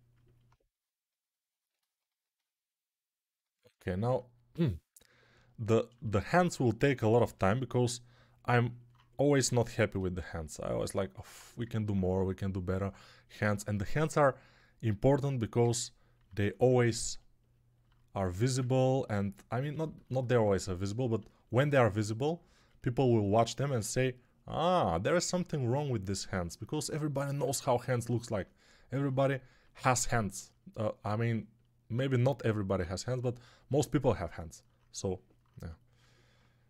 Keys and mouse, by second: 7.1 g, 27.3 ctrl+z.